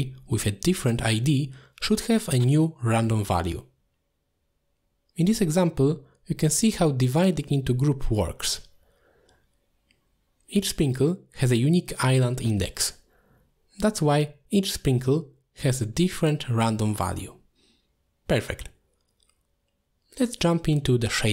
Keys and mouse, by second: 1.2-1.5 drag, 1.8 x, 2.4 middle click, 3.0-4.2 drag, 4.7 shift+click, 5.3 click, 6.4 click, 6.9 middle click, 11.4 shift+middle click, 12.1 click, 13.0 click, 13.7 click, 14.4 click, 15.2 click, 15.4 click, 15.5 click, 17.1 middle click, 17.6 ctrl+z, 17.7 ctrl+z, 17.9 ctrl+z, 18.0 ctrl+z, 18.1 ctrl+z, 18.3 ctrl+z, 18.4 ctrl+z, 19.8 click.